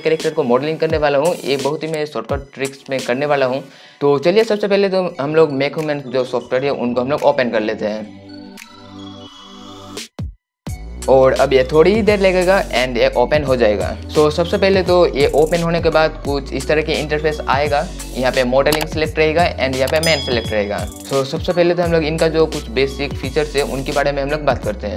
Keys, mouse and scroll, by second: 19.4 click.